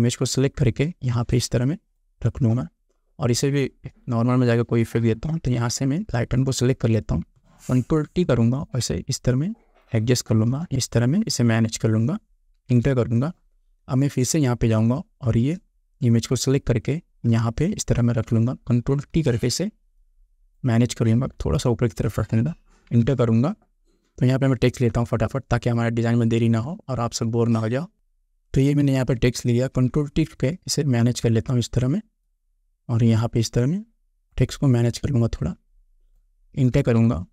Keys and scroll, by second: 7.9 ctrl+t, 12.9 Return, 19.4 ctrl+t, 23.1 Return, 29.8 ctrl+t, 37.0 Return.